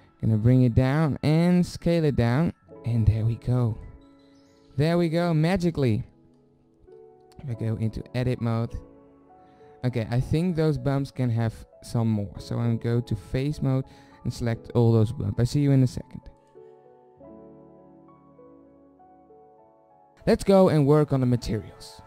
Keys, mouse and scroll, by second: 1.0 s, 5.7 f, 7.4 Tab, 11.3 Tab, 13.4-14.8 middle drag, 18.7 Tab, 18.9 drag.